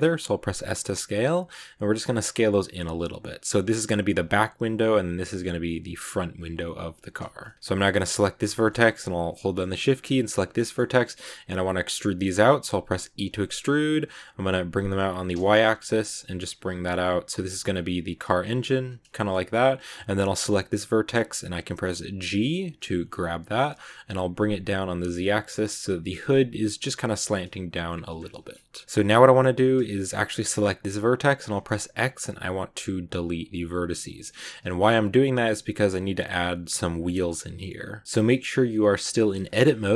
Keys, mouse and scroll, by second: 0.4 s, 6.5 click, 7.3 shift+middle click, 7.9 right click, 8.4-10.1 shift+middle drag, 10.1 shift+right click, 10.4-13.0 shift+middle drag, 13.0 e, 19.0 shift+scroll up 1, 19.0-20.0 shift+middle drag, 20.0 right click, 22.1 g, 28.1 scroll down 2, 28.2 shift+middle click, 28.8 click, 29.0-29.4 scroll up 3, 30.3 right click, 31.3 x, 33.7 scroll down 1, 33.9 shift+middle click, 34.5 a, 38.0 click, 39.5 click.